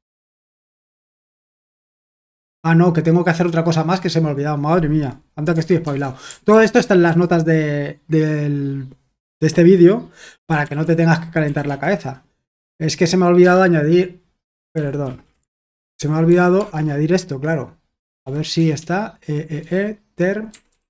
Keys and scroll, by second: 5.8 typing, 10.1-12.1 typing, 13.4 Return, 14.7 ctrl+p, 15.0 ctrl+a, 15.5-16.5 typing, 16.7 Return, 17.9-18.7 typing, 20.3-20.8 typing.